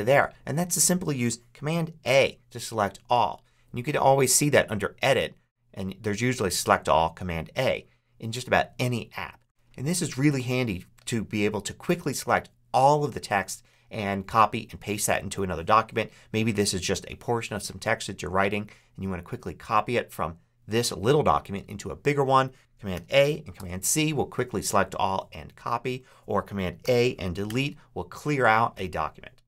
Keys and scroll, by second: 1.9 super+a, 22.8 super+a, 26.7 super+a, 27.3 super+BackSpace, 27.8 BackSpace.